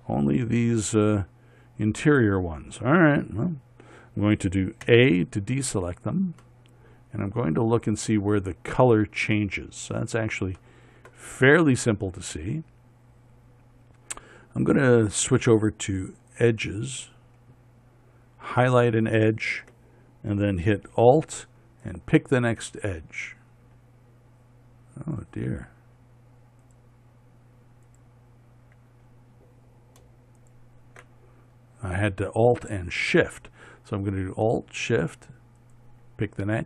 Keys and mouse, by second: 5.4 a, 7.0-9.0 middle drag, 11.1 middle click, 11.9 middle click, 19.3-22.4 right drag, 33.7-36.6 middle drag.